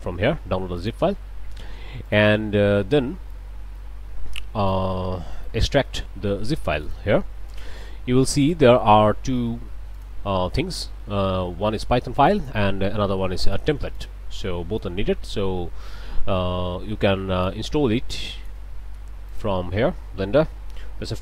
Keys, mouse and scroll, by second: 0.8 click, 2.1 click, 3.3-4.9 drag, 5.3-6.6 right drag, 6.8 click, 7.5 click, 8.2 click, 9.9 click, 12.2 click, 13.5 click, 13.9 click, 14.8-17.7 drag, 18.1 click, 19.3 click, 21.0 F4.